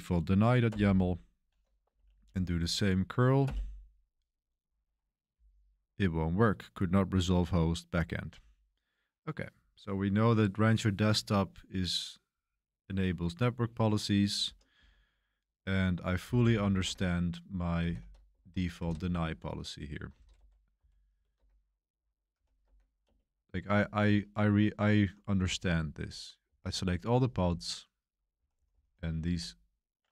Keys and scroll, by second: 0.6 Return, 1.9 Up, 2.1 Up, 3.4 Return, 14.7 ctrl+l, 16.2-17.9 typing, 18.3 ctrl+c, 18.7 ctrl+b, 20.1 ctrl+b, 20.2-21.3 typing, 22.3-28.8 typing.